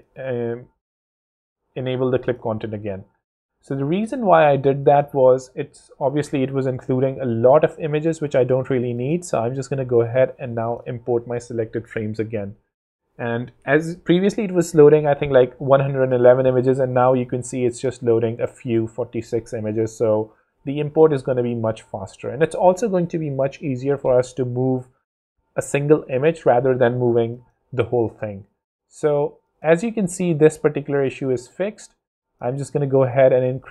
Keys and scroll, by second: 0.6 v, 1.5 super+v, 1.7 super+s, 5.7 super+Tab, 11.8 super+Tab.